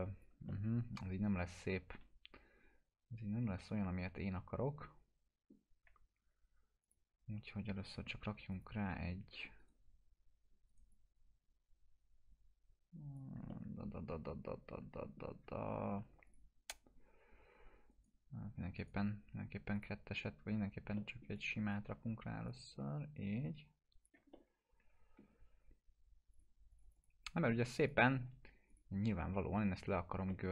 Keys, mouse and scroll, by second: 0.5-5.5 alt+middle drag, 6.8 click, 9.6 right click, 10.9-13.4 drag, 13.5-15.4 alt+middle drag, 16.3 click, 17.9 right click, 19.7 click, 20.9 alt+middle click, 21.3-22.0 drag, 24.3-26.3 alt+middle drag, 26.3 click, 30.3 middle click.